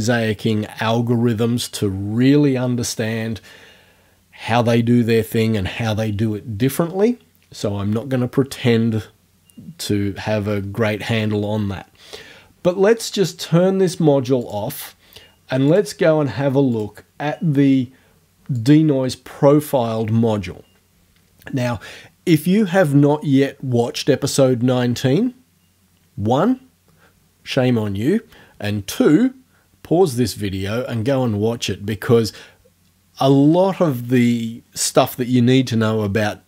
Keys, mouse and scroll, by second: 14.4 click, 15.8 click, 16.8 click, 18.6 click.